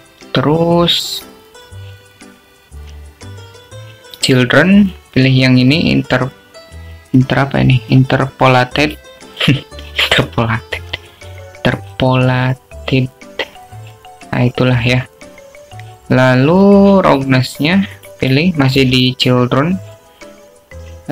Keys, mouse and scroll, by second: 6.3 click, 11.3 click, 20.1 click.